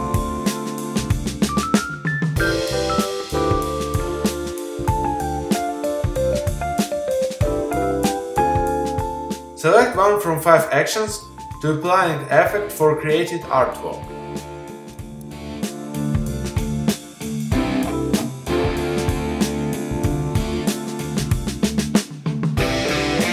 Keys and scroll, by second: 1.0 Return.